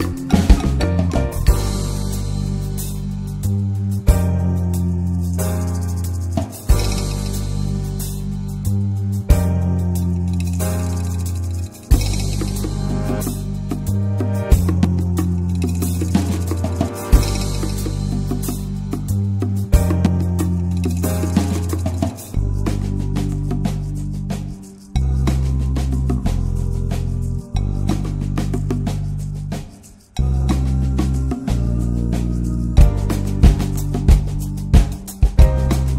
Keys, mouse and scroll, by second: 0.4-1.7 shift+middle drag, 1.7 click, 3.3 click, 3.4-4.3 scroll up 3, 4.9-6.4 drag, 6.4 n, 6.8-8.1 shift+middle drag, 8.1 click, 11.0 click, 11.2 click, 11.4-13.0 drag, 14.5 click, 15.1-15.7 middle drag, 15.7 ctrl+s, 16.4 click, 17.4 click, 17.8-18.3 drag, 19.0-20.5 drag, 20.5 n, 20.7 n, 28.7-30.1 drag, 30.1-31.3 middle drag, 31.3-33.6 drag.